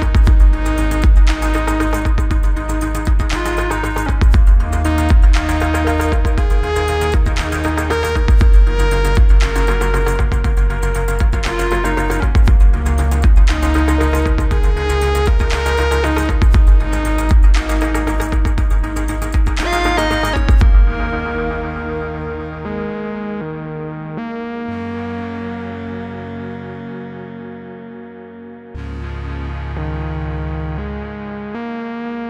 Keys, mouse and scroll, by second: 4.8 scroll up 1, 5.7 click, 7.0 click, 13.0 r, 13.5-15.2 click, 19.8 ctrl+d, 21.5-22.8 click, 23.4 r, 23.9-25.0 click, 29.0-30.1 shift+click.